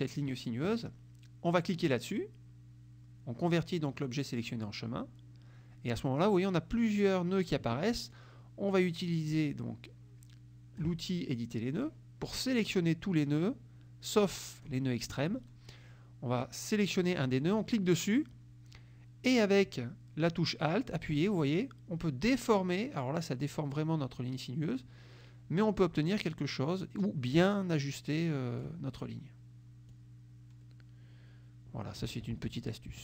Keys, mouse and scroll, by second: 4.6 click, 8.3-11.1 drag, 11.8 click, 12.3-15.0 drag, 17.7-28.9 drag, 30.0-32.3 alt+drag, 32.7 ctrl+z.